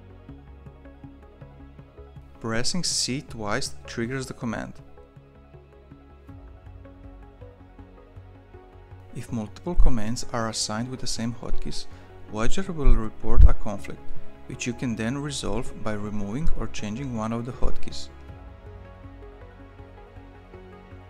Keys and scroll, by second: 2.2 c, 2.3 c, 6.3 ctrl+shift+p, 10.9 ctrl+w, 14.5 Tab.